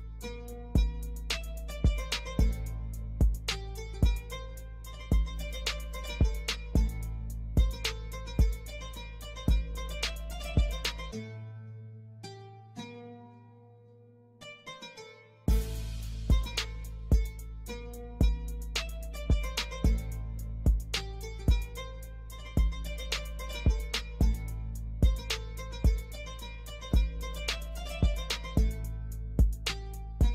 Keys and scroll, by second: 1.5 ctrl+z, 2.1 shift+F2, 3.0 Escape, 5.1 F4, 6.4 F2, 9.1 shift+F2, 21.6 F4, 25.9 shift+F2, 26.4 shift+Page_Up, 26.7 F3.